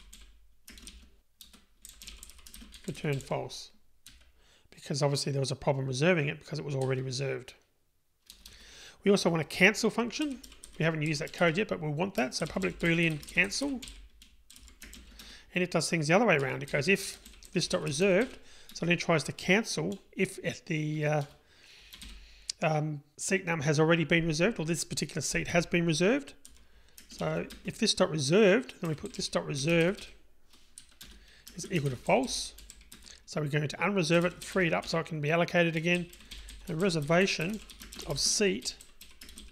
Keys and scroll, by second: 18.8 Return, 31.1 Return, 38.9 Tab.